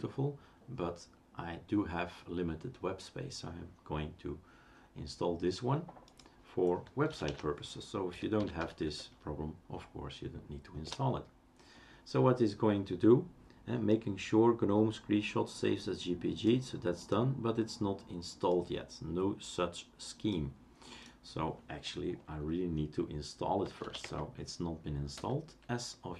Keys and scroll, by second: 7.2-9.1 typing, 10.8 Return, 23.6-26.1 typing.